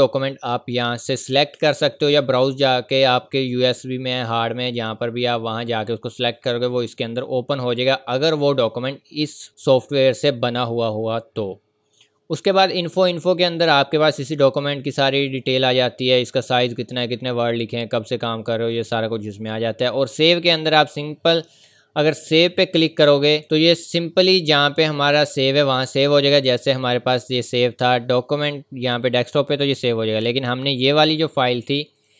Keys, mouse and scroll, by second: 10.0-12.3 scroll up 1, 12.4 click, 19.9 click, 25.7 click.